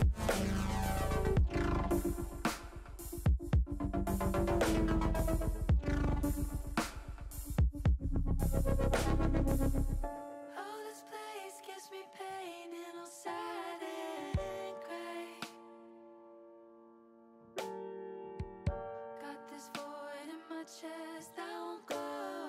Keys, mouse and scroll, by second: 0.6 ctrl+z, 1.3 click, 2.9 click, 3.3 click, 3.5 click, 3.6 click, 3.9 right click, 5.8 click, 7.2 middle click, 7.9 middle click, 9.7 click, 10.2 shift+middle click, 10.7 middle click, 11.7 shift+click, 12.3 shift+click, 12.8 shift+click, 13.1 shift+middle click, 13.9 shift+click, 14.2 shift+click, 14.6 middle click, 15.3 shift+middle click, 18.0 e, 19.4 s, 20.6 click, 20.8 ctrl+z, 22.2 click.